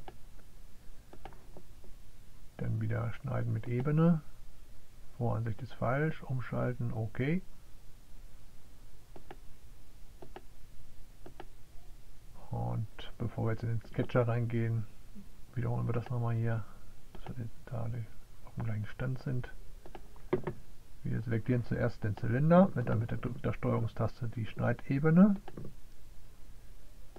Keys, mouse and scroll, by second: 5.2 click, 6.0 click, 8.0 click, 8.9 click, 13.0-16.1 drag, 25.6 click.